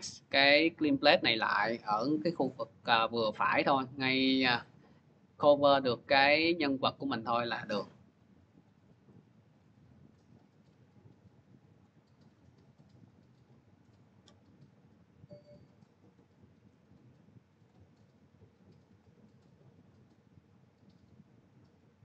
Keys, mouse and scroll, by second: 2.7 click, 3.0 click, 4.0 click, 5.6 click, 6.2 click, 6.8 click, 7.4 click, 8.0 click, 8.5 click, 9.4 click, 9.9 click, 10.7 click, 11.6 click, 12.1 click, 12.9 click, 15.6 click, 17.5 click, 18.8 click.